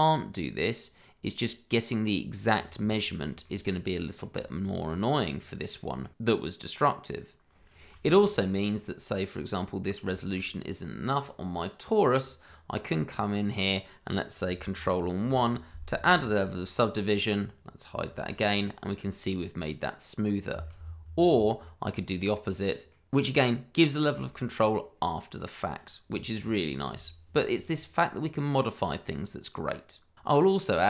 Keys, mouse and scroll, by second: 2.6 click, 2.8-3.2 scroll down 1, 3.2 shift+middle click, 3.5-3.9 scroll up 1, 3.9 middle click, 4.3 Tab, 6.1 shift+middle click, 6.5-7.6 scroll down 1, 7.8 shift+middle click, 8.0 scroll up 1, 9.3 click, 9.6 middle click, 9.8-10.1 scroll up 1, 10.1 middle click, 11.0 shift+middle click, 12.1 click, 12.9 middle click, 15.2 ctrl+1, 18.0 h, 18.5-19.2 scroll up 1, 19.2-20.2 scroll down 1, 21.5-22.4 scroll down 1, 22.4 middle click, 23.2 scroll down 1, 23.3 middle click, 24.3 shift+middle click, 24.7-25.7 scroll up 1, 25.7 click, 26.8 h, 27.6 click, 30.6-30.8 scroll down 1.